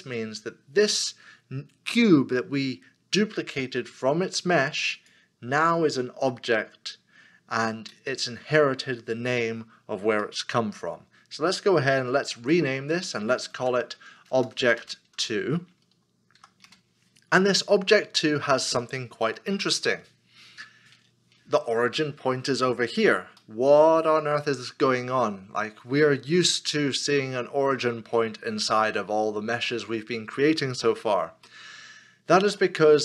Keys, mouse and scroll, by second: 8.0 middle click, 10.8-12.4 scroll down 1, 12.6 F2, 13.6 Right, 14.3-15.1 typing, 16.6 Return, 16.9 Return, 23.5 middle click, 24.3-25.2 scroll up 1, 25.2 middle click, 29.7 middle click, 31.7 shift+middle click.